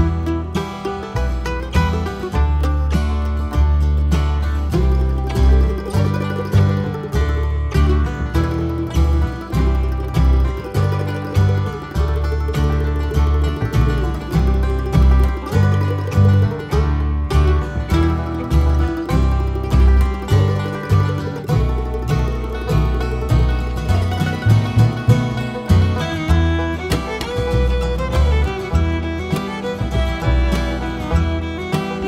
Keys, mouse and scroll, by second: 0.0 click, 1.2 Tab, 1.4 click, 5.8 ctrl+right click, 6.2 click, 9.0 click, 10.6 KP_7, 11.6 g, 12.2 click, 12.4 t, 12.7 r, 13.4 Tab, 14.7 r, 15.7 g, 17.4 click, 18.0 Tab, 18.2 click, 18.6 g, 19.2 r, 19.4 click, 20.8-24.0 typing, 21.1 click, 23.9 Tab, 26.1 scroll down 1, 26.2 KP_7, 26.9 alt+a, 29.2 click, 30.3 s, 31.6 g.